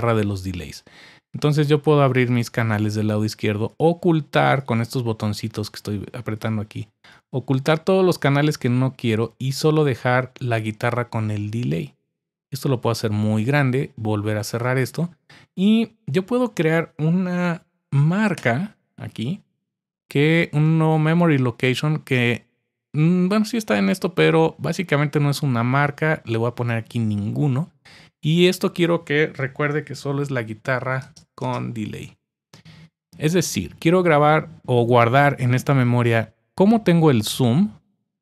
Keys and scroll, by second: 18.3 Return, 29.4-32.8 typing.